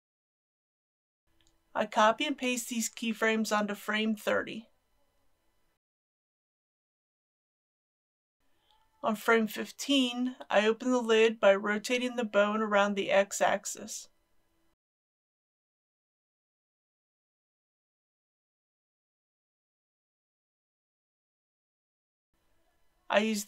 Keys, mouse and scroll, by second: 1.6 click, 2.9 ctrl+c, 3.5-5.2 drag, 5.5 ctrl+v, 8.0-9.7 drag, 13.9 r, 14.7 x, 16.4 KP_6, 16.6 KP_0, 19.2-19.8 scroll down 1, 19.9 shift+middle click.